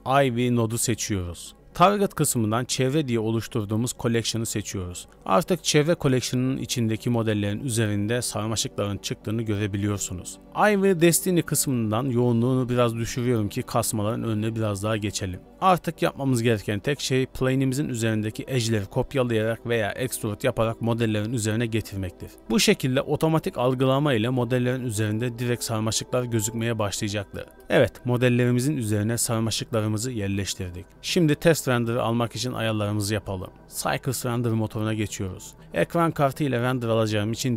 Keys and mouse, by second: 0.2 click, 0.6 click, 1.6 g, 1.8-5.2 drag, 5.8 KP_Decimal, 6.3 middle click, 6.4-7.7 middle drag, 7.7-11.1 drag, 11.8 click, 12.6-15.2 middle drag, 15.2 2, 15.2 KP_7, 15.9 middle click, 16.4 shift+click, 18.7 r, 18.9 g, 21.5 shift+middle click, 24.1 shift+middle click, 24.8 g, 30.9-31.3 middle drag, 31.8 middle click, 32.1 KP_0, 33.4 z, 34.1-34.8 drag.